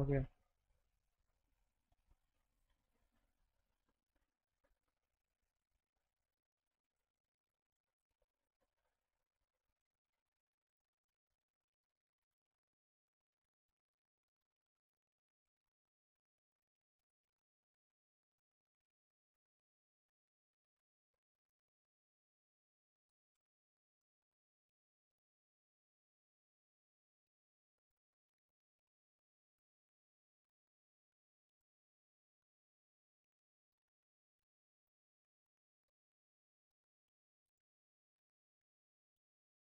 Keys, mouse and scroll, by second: 2.5 click, 3.4 click, 3.7 click, 4.0 click, 4.4 click, 5.9 middle click, 7.0 click, 8.0 click, 8.4 click, 9.5 middle click, 10.6 click, 11.4-13.2 drag, 14.9 click, 15.9-17.0 drag, 17.7 click, 18.1 click, 19.0 middle click, 20.4 click, 21.6 click, 24.0 z, 25.8 click, 26.1 click, 26.5 middle click, 26.7 alt+middle click, 27.4 middle click, 27.9 F3, 28.4 alt+middle click, 29.2 click, 29.6 alt+middle click, 31.0 shift+click, 31.6 click, 32.2-33.5 shift+drag, 34.6 click, 35.3 ctrl+click, 35.6 alt+middle click, 36.5-37.5 shift+drag, 38.3 click, 38.7 alt+middle click, 39.4 ctrl+click.